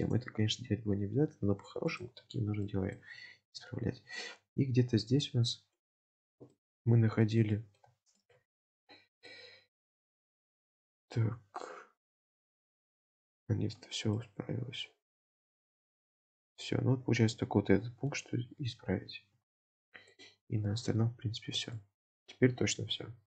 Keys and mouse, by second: 0.0 click, 0.7 x, 2.7 shift+middle click, 3.4 alt+z, 3.9 1, 4.3-5.8 middle drag, 6.0 shift+middle click, 6.5 middle click, 7.5 shift+middle click, 8.2 alt+middle click, 8.4 alt+z, 9.4-13.4 middle drag, 13.8 alt+z, 14.2-15.7 middle drag, 16.0 middle click, 17.4 middle click, 21.0 KP_7, 21.9 shift+drag.